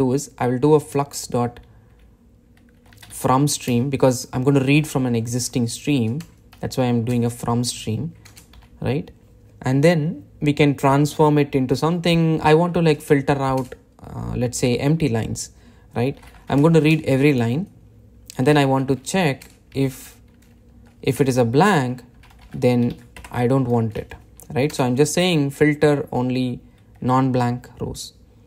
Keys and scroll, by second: 4.2 Return, 7.5 Return, 14.0 Return, 19.9 Return, 23.7 Tab.